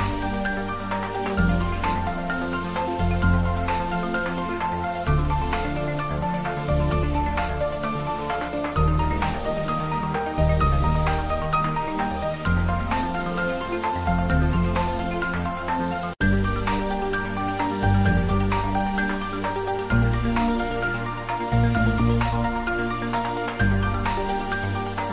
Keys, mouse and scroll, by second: 1.2 click, 2.5 ctrl+middle click, 3.6 click, 4.0 Tab, 4.8-6.1 drag, 6.1 Tab, 6.4 s, 7.0 click, 7.1 Tab, 8.5 ctrl+r, 8.8 click, 9.9 ctrl+z, 11.2 click, 13.4 s, 13.8 click, 14.0 ctrl+z, 14.6 s, 16.1 click, 16.7 ctrl+z, 17.9 click, 18.4 ctrl+b, 18.9 click, 19.7 ctrl+z, 20.9 s, 22.0 click, 22.4 g, 23.1 click, 24.1 ctrl+b.